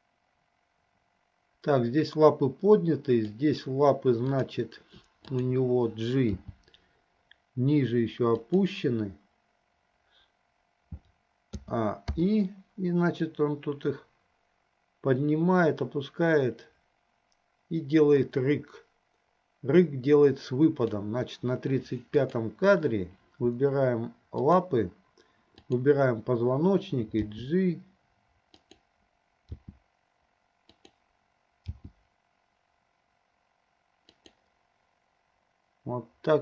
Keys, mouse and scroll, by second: 4.5 click, 5.5 shift+click, 6.6 g, 11.7 a, 12.3 i, 13.5-21.3 drag, 22.3 click, 24.5 shift+click, 25.9 shift+click, 27.5 g, 29.7 r, 32.0 g.